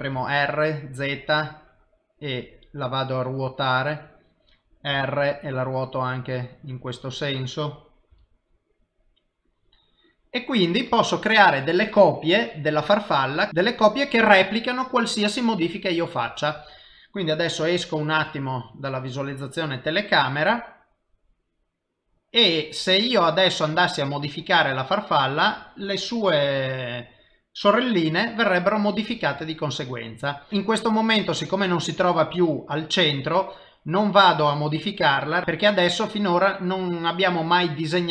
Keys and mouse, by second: 0.0 r, 5.3 r, 8.5 g, 13.5 click, 18.4 KP_0, 19.8 middle click, 30.2 middle click, 32.5 middle click.